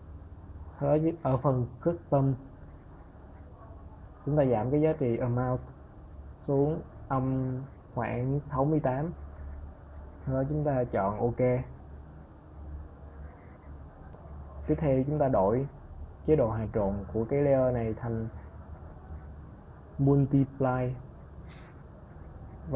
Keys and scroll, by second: 6.5 KP_Subtract, 7.6 6.